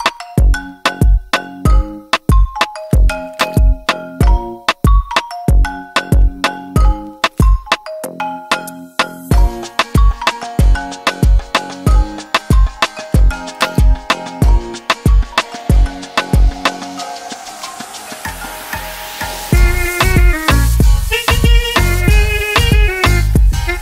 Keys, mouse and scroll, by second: 0.2 click, 0.5 double click, 1.8 click, 3.5 BackSpace, 3.8 4, 5.3 click, 5.5 Return, 7.3 click, 11.8 click, 13.3 click, 16.2-16.7 typing, 17.0 Right, 17.8 BackSpace, 18.4 Return, 20.4 click.